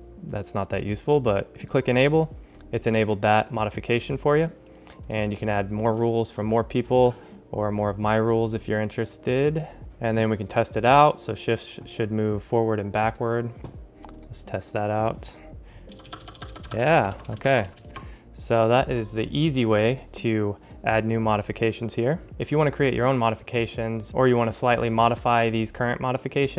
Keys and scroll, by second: 16.0 alt+shift+Right, 17.3 alt+shift+Left.